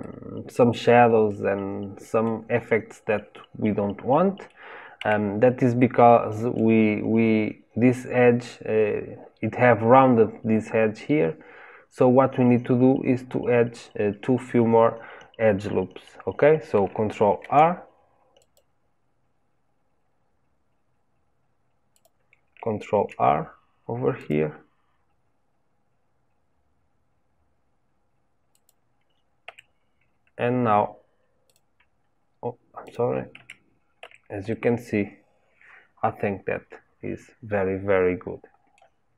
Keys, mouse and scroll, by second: 4.9 Tab, 5.7-8.7 middle drag, 17.3 ctrl+r, 22.9 ctrl+r, 29.4 Tab, 31.4 click, 32.8 click, 33.3 Tab, 33.9 Tab, 34.4-39.1 middle drag.